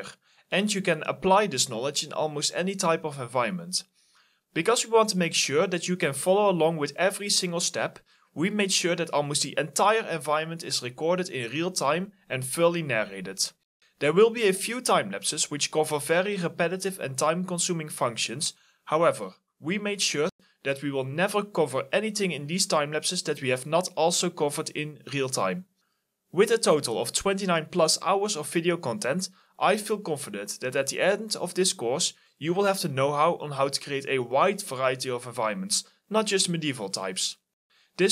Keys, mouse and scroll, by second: 0.5 Delete, 0.9 double click, 1.0 middle click, 1.2 Delete, 1.4 double click, 1.7 Delete, 2.0 middle click, 2.4 Delete, 2.8 middle click, 3.9 Delete, 4.5 alt+middle click, 5.4 Delete, 6.3 shift+click, 6.4 scroll down 1, 6.5 middle click, 7.0 alt+e, 7.4 right click, 9.4 middle click, 9.7 alt+middle click, 9.8 scroll up 1, 9.9 middle click, 10.2 alt+middle click, 11.2 right click, 11.5 scroll up 1, 11.9 scroll down 1, 12.3 middle click, 12.6-13.0 scroll up 2, 12.8 middle click, 13.6 scroll down 1.